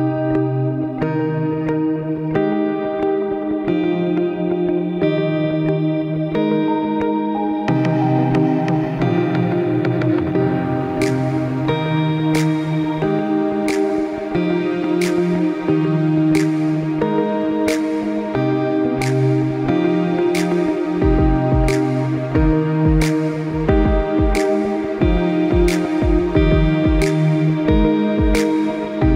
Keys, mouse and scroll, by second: 0.3 click, 0.6 click, 1.4 e, 3.4 click, 4.2 e, 6.1 middle click, 6.6 KP_0, 8.1 click, 8.8 click, 9.4 click, 10.0 click, 10.7 middle click, 11.8-12.3 scroll up 4, 12.3 middle click, 12.9 scroll down 2, 13.2 middle click, 13.7-14.2 scroll up 3, 14.2-14.7 scroll down 2, 14.9 click, 16.1 Tab, 16.4 click, 17.2 g, 19.8 r, 24.6 click, 25.8 middle click, 26.5-27.0 scroll down 1, 27.0-27.4 scroll up 1, 27.4 middle click.